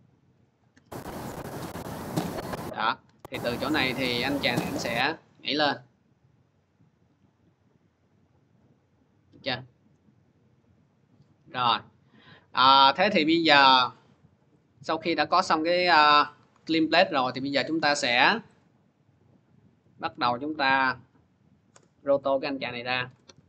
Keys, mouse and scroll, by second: 0.4 click, 2.7 click, 6.8-7.8 drag, 13.6 click, 18.0 click, 18.7 scroll, 19.8 click, 20.3 ctrl+d, 20.5 middle click, 21.5 Return, 22.6-23.4 typing.